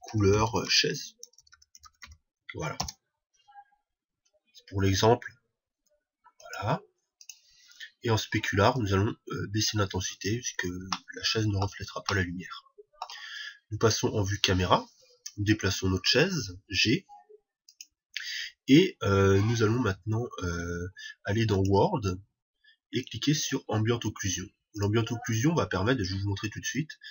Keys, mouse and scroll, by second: 6.8-11.1 drag, 6.8 middle click, 11.4-14.4 middle drag, 16.7 g, 18.2-20.1 drag, 21.9-27.1 drag.